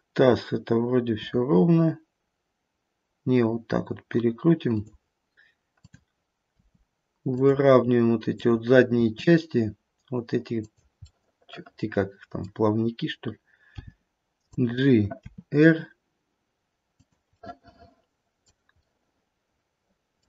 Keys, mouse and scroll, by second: 1.0 r, 5.7 click, 6.5 r, 8.3 click, 9.0 r, 11.0 middle click, 13.8 g, 15.2 r, 17.4 middle click, 18.8 middle click, 19.3 middle click.